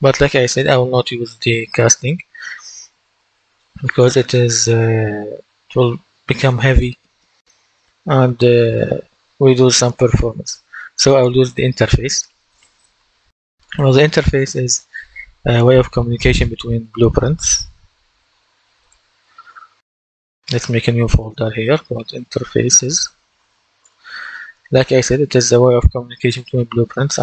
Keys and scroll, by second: 2.9 Delete, 21.4-23.6 typing, 23.7 Return.